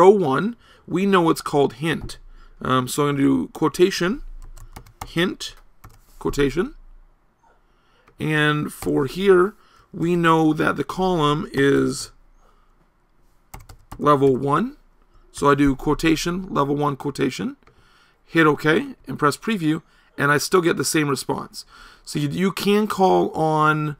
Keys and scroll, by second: 8.9 BackSpace.